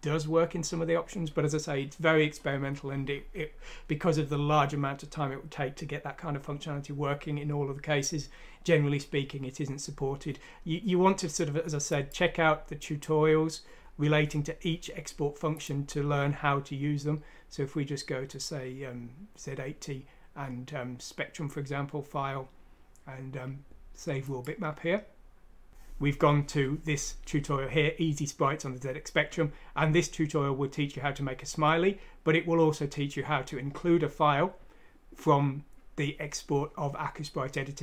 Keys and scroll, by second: 25.7 Return.